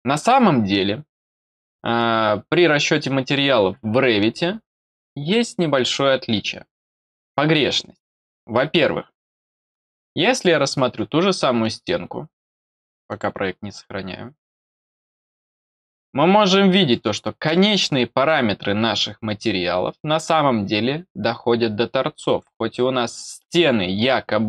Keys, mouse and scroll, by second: 10.2 click, 10.9-13.0 middle drag, 13.0 click, 14.4 click, 15.9 middle click, 17.4 scroll down 1, 18.2 middle click, 22.2 click.